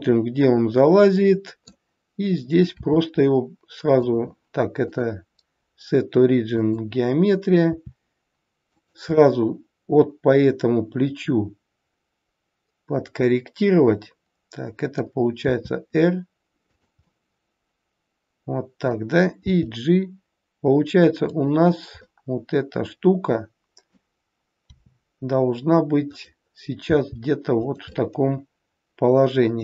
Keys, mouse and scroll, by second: 2.7 r, 4.7 click, 7.6 r, 9.2 middle click, 15.3 r, 17.1 middle click, 19.3 g, 22.0 middle click, 24.6 r, 26.8 g, 28.0 middle click.